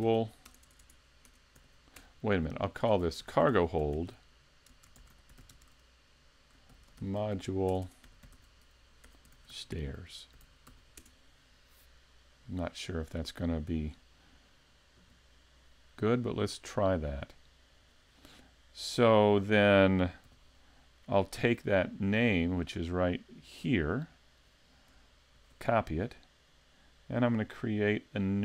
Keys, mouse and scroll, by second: 0.6 BackSpace, 0.8 BackSpace, 7.8 BackSpace, 15.0 KP_Decimal, 20.3 n, 21.5-23.0 scroll up 1, 23.0 click, 23.0 scroll up 1, 24.2 click, 27.3 click.